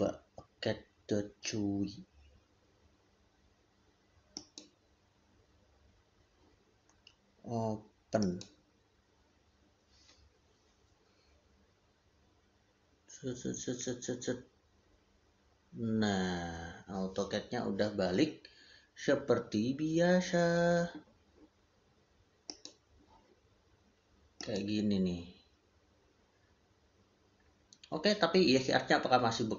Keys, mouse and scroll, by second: 4.2 click, 8.1 click.